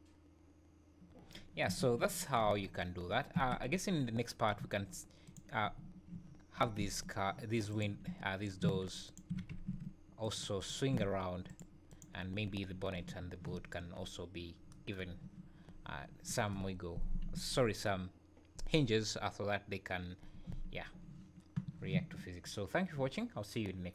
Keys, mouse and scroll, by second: 1.6 Escape, 2.0 `, 2.4 space, 3.3 Escape, 3.7 `, 4.1 scroll up 4, 5.2 click, 5.6 `, 6.5 r, 9.1 click, 9.3 r, 10.6 click, 10.9 r, 11.9 click, 13.5 `, 15.4 `, 20.7 scroll down 4.